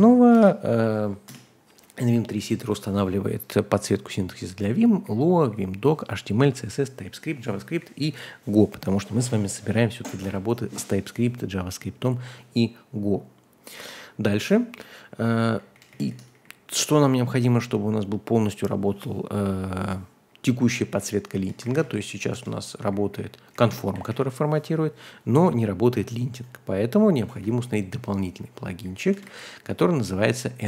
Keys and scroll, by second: 0.0-1.2 typing, 2.6-3.5 typing, 15.5-16.8 typing, 20.9-24.3 typing, 21.6 ctrl+h, 27.3 super+c, 28.6-30.2 typing, 29.7 Escape.